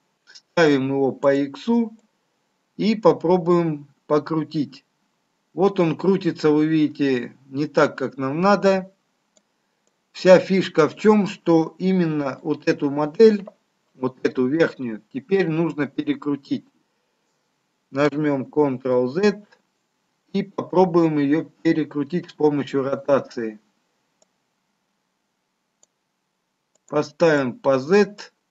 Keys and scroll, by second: 18.5 ctrl+z.